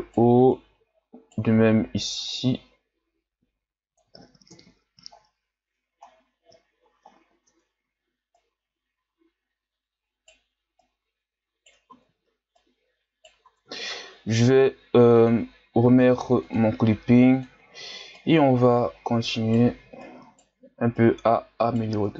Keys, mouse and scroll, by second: 0.5 right click, 1.6 ctrl+z, 2.3-4.5 drag, 4.5 KP_1, 5.2-5.6 scroll down 3, 5.6 Tab, 6.1-6.6 scroll down 2, 6.6-7.4 shift+scroll up 5, 7.4 Tab, 8.4 right click, 10.8 right click, 12.0 ctrl+z, 12.6 right click, 13.5 ctrl+z, 15.1-18.2 drag, 18.2 right click, 20.0 right click, 20.9 right click, 22.0 Tab.